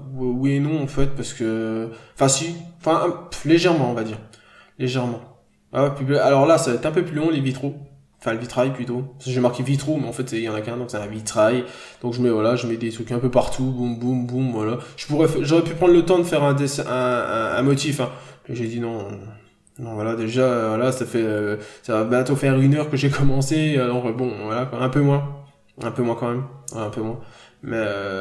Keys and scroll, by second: 2.4 ctrl+z, 4.2 scroll down 1, 4.3 n, 4.8-5.2 scroll up 1, 5.7-6.0 scroll up 1, 6.2-6.6 scroll down 1, 7.4-8.0 scroll up 1, 9.6 b, 10.9 n, 12.0 ctrl+z, 13.0 ctrl+z, 13.4 b, 14.6 ctrl+z, 16.6 n, 18.7 b, 21.7 n, 22.7 ctrl+z, 23.8 n, 24.1 b, 24.9 ctrl+z.